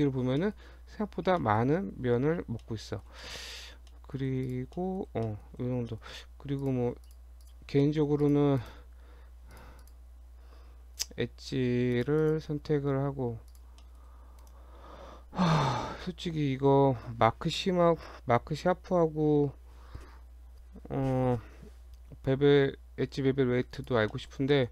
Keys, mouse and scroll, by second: 0.4 middle click, 0.6-0.9 scroll down 1, 1.0 Tab, 1.3 scroll down 2, 1.4 middle click, 2.1-2.8 scroll down 5, 2.6 middle click, 3.2 shift+middle click, 3.6 scroll down 2, 3.9 shift+middle click, 4.5 click, 4.8 middle click, 5.2 shift+middle click, 5.5 scroll up 1, 5.9 middle click, 6.6 click, 7.1 click, 7.9 shift+middle click, 8.3 click, 8.7 right click, 9.6 click, 9.9 click, 11.0 2, 12.0 click, 12.3 click, 12.5 Tab, 13.5 click, 13.9 shift+middle click, 14.4 right click, 23.8 click, 24.2 middle click, 24.6 shift+middle click.